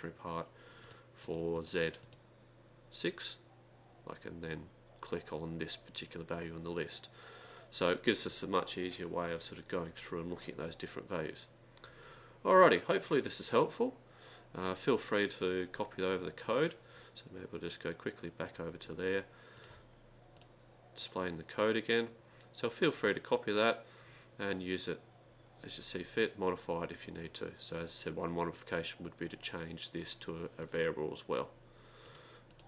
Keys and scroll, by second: 1.4 Down, 1.4 Up, 1.4 Right, 2.0 Down, 5.1 Down, 5.1 Right, 18.5 Down, 18.5 Up, 18.5 Right, 19.8 Right, 19.8 Delete, 20.6 Return, 32.2 Delete, 32.2 Return, 32.2 Up, 32.5 Right.